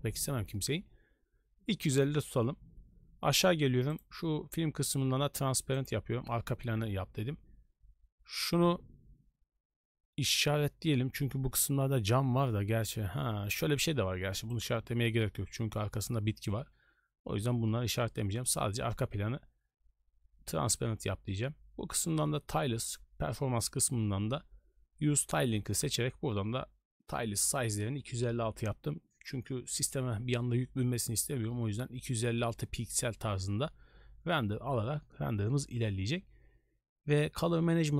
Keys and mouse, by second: 3.9 click, 5.7 click, 10.3 click, 14.5 click.